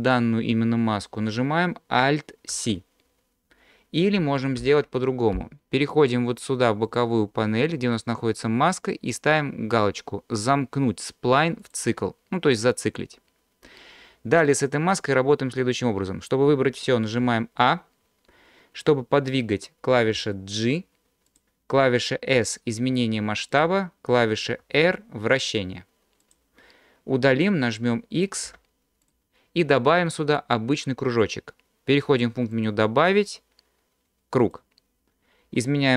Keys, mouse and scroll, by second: 2.5 alt+c, 4.6 ctrl+z, 6.9 click, 11.6 click, 17.2 a, 20.2 g, 21.3 click, 22.3 s, 23.5 click, 24.6 r, 26.2 click, 28.4 x, 33.3-34.7 drag.